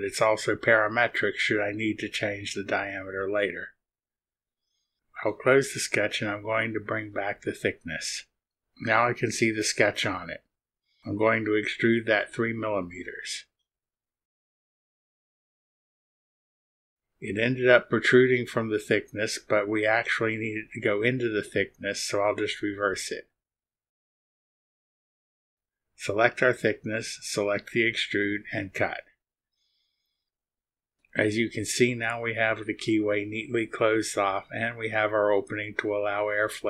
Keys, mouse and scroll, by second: 4.6-6.1 drag, 6.9 space, 8.2 click, 9.1 click, 10.8 click, 12.8 click, 14.2 KP_3, 15.8 click, 17.5 click, 18.4-18.7 scroll down 4, 20.2 click, 20.8 click, 22.0 click, 23.3 click, 25.3 click, 26.0 ctrl+click, 28.9 click, 33.7 scroll up 1, 34.3 scroll up 1, 35.2-36.6 drag.